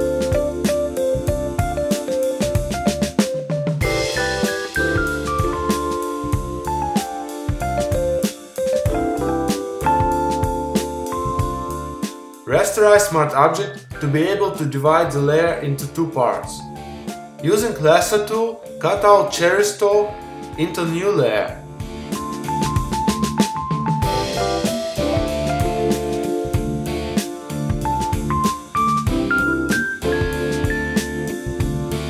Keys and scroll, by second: 28.1 super+t, 29.9 Return.